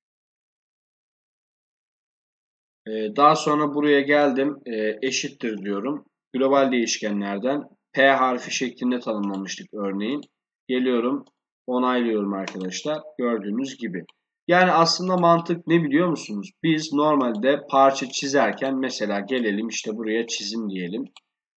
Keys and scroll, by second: 5.5 shift+0.